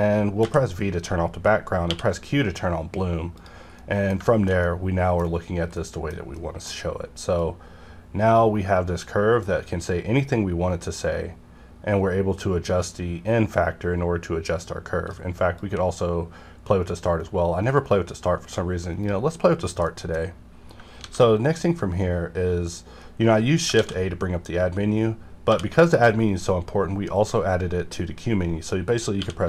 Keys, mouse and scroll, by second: 0.4 v, 1.9 q, 3.4 click, 3.8-6.4 middle drag, 6.7 scroll up 1, 7.4-18.9 drag, 18.9 right click, 19.8 middle click, 20.2 scroll down 1, 21.0 shift+a, 23.7 shift+a, 25.5 q, 29.2 q.